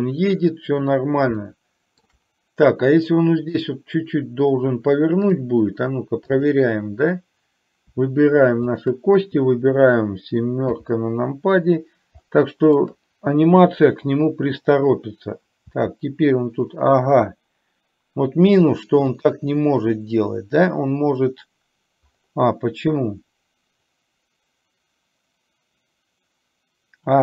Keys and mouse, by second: 1.5 shift+middle click, 3.6 click, 6.5 click, 8.8 shift+click, 12.3 shift+middle click.